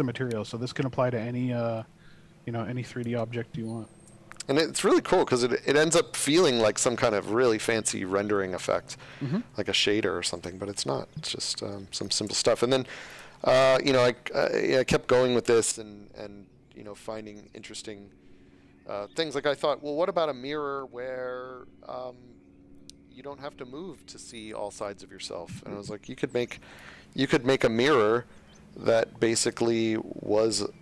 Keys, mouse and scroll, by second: 3.3 space, 4.5 click, 10.9 space, 12.0 click, 13.0 click, 22.7 click, 26.7-27.5 typing, 28.1-29.2 scroll, 29.6 shift+scroll.